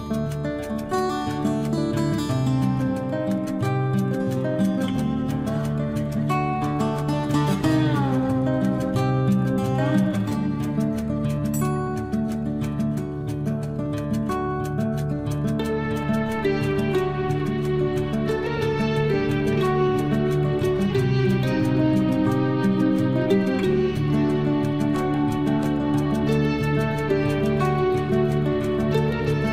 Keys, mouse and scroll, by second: 7.9 click, 11.3 Escape, 15.9 Escape, 16.4-16.8 scroll up 1, 16.8-18.3 middle drag, 18.3-19.2 scroll up 1, 19.2 middle click, 20.4 click, 22.4 space, 28.3 click, 29.1-29.5 scroll up 1.